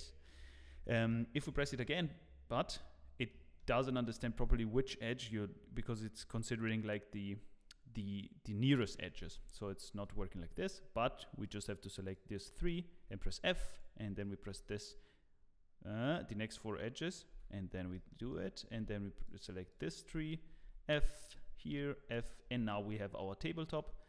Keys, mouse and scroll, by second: 0.5 shift+middle click, 0.6 scroll down 2.